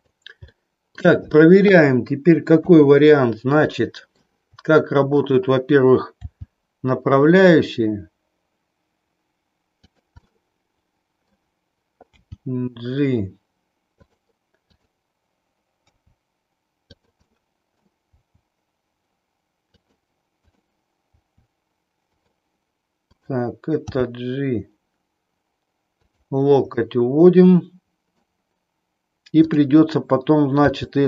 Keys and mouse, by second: 0.5 middle click, 2.6 KP_3, 3.9 shift+middle click, 6.1 g, 10.4-11.4 middle drag, 12.0 g, 14.8 click, 15.8 r, 17.4 middle click, 18.3 r, 19.9 click, 20.4 click, 21.1 r, 22.1 click, 23.1 click, 23.9 g, 26.8-28.3 middle drag, 29.4 click, 30.6 g.